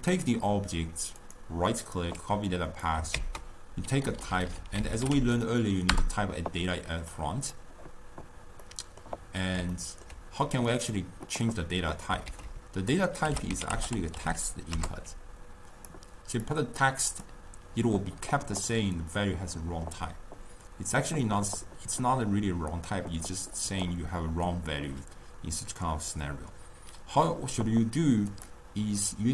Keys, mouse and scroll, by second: 1.3-2.8 right drag, 2.8-4.3 drag, 4.3 Left, 4.4 Left, 7.2 click, 8.7-11.2 middle drag, 11.2 drag, 12.3 ctrl+a, 16.5-19.6 drag, 28.4-29.3 drag.